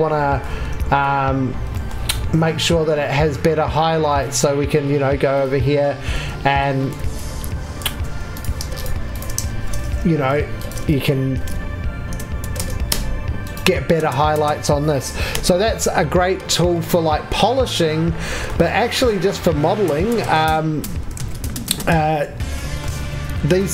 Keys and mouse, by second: 0.8 alt+q, 6.1 4, 7.0 alt+q, 8.0 3, 9.5 shift+x, 9.9 2, 11.3 alt+v, 12.6 Tab, 21.1 alt+q.